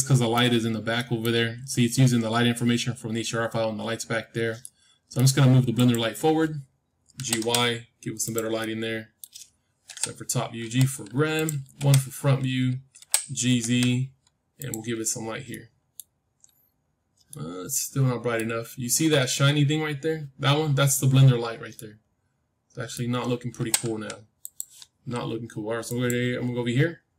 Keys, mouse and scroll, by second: 3.9-4.6 scroll down 1, 4.6-5.7 middle drag, 5.7-7.7 drag, 7.1 g, 8.5-10.5 middle drag, 9.8 KP_7, 10.5 g, 11.7 KP_1, 12.3-13.8 scroll up 1, 12.9 g, 13.8-14.4 scroll up 1, 14.9-15.4 scroll up 1, 15.4-19.2 middle drag, 20.6-21.6 scroll down 1, 21.6-23.7 middle drag, 23.5 g, 25.8-27.1 drag.